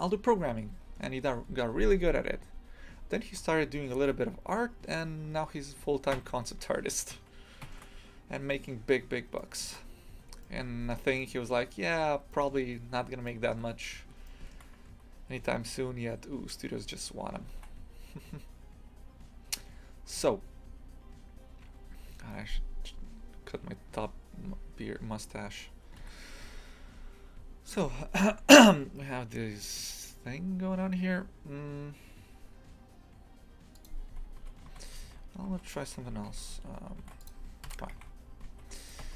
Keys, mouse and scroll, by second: 4.0 Tab, 5.2 scroll down 1, 6.1 Tab, 8.4 scroll up 1, 9.4-10.0 shift+middle drag, 10.0 scroll up 1, 10.4-14.9 shift+middle drag, 14.9 Tab, 17.5 ctrl+r, 33.9 click, 34.4 Tab, 34.7 shift+f, 37.7 KP_Divide, 37.9 shift+f, 39.0 Tab.